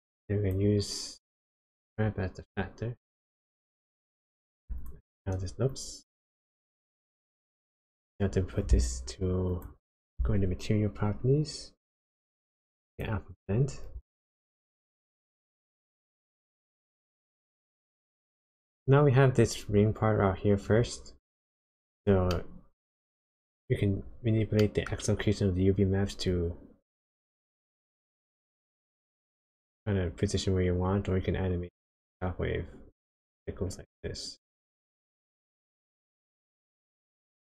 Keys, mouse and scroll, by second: 1.5 click, 4.0 click, 4.9-5.2 ctrl+shift+click, 5.7 click, 6.6 click, 7.4 click, 9.5 click, 11.7 click, 15.8 click, 17.5 click, 22.3 middle click, 23.2-24.6 scroll up 7, 24.6 middle click, 26.3 shift+click.